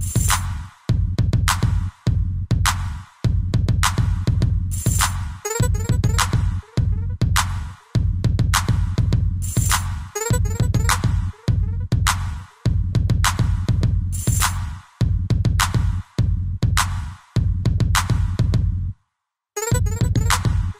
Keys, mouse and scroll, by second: 0.6 alt+r, 2.2 ctrl+z, 3.1 Right, 3.3 Right, 3.5 Right, 4.8 Left, 5.4 Left, 6.5 ctrl+v, 7.0 Right, 7.2 Right, 7.4 Right, 9.6 ctrl+s, 11.0 scroll up 1, 11.0-11.6 scroll down 3, 11.9 middle click, 12.8 click, 14.3 shift+space, 17.8 Escape, 17.9 scroll down 2, 18.3 shift+middle click, 18.5 middle click, 18.7 ctrl+g, 18.9 middle click, 19.8 shift+Left, 20.2 shift+space.